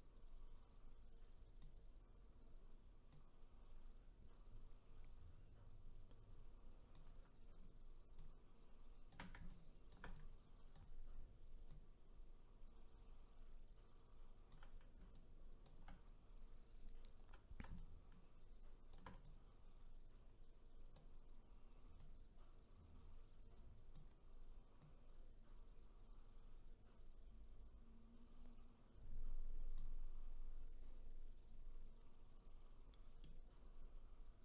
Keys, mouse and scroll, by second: 3.1-6.1 drag, 8.2-11.7 shift+right drag, 11.7-14.7 drag, 15.1-22.0 shift+right drag, 22.0-27.9 drag, 33.2-34.4 middle drag.